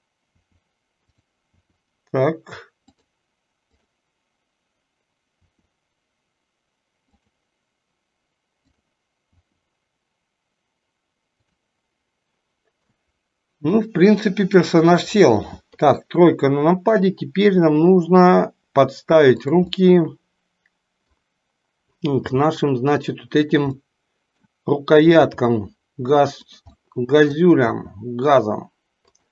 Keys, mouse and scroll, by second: 0.4 r, 1.6 r, 3.6 click, 5.5 r, 8.5 click, 9.4 r, 13.0-13.8 middle drag, 15.8 KP_3, 17.6 g, 19.9-21.3 middle drag, 22.3 g, 23.7 middle click, 25.2 r, 26.9 middle click, 27.7 r.